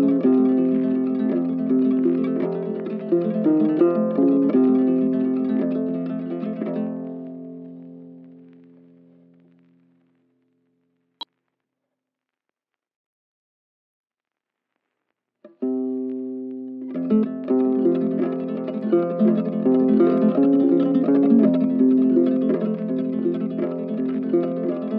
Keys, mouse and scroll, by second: 1.8 right click, 5.4 ctrl+shift+click, 6.4 ctrl+shift+click, 13.0 double click, 17.5 double right click, 19.2 right click.